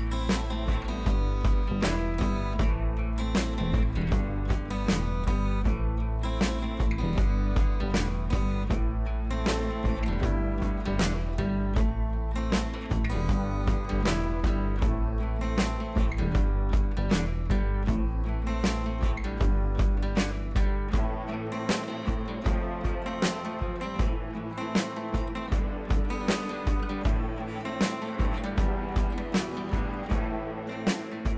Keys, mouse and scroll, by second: 0.3 click, 6.2 click, 7.8-19.1 drag, 20.8 scroll up 1, 21.4-31.3 drag.